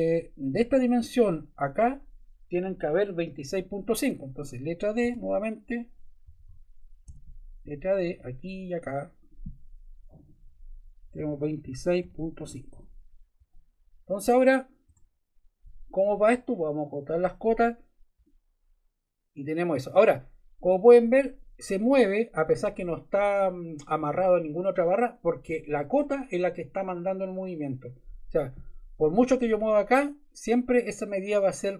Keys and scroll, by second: 4.9 d, 6.2 Escape, 7.0 d, 10.9-12.8 typing, 14.8 Escape.